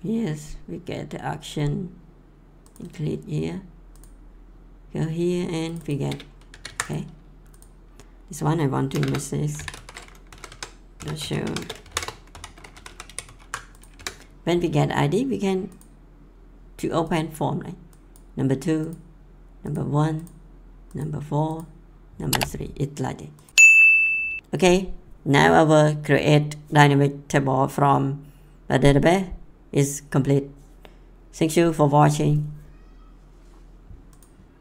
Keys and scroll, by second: 6.5 ctrl+c, 8.9 Return, 9.3-12.7 typing, 10.3 Down, 10.5 Tab, 13.1 ctrl+v, 13.9 F5.